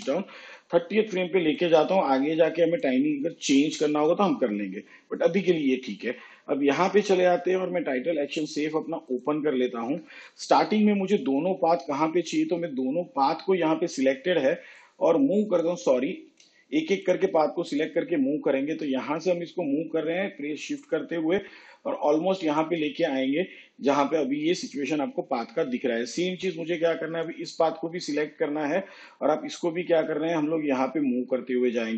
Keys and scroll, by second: 16.2 ctrl+z.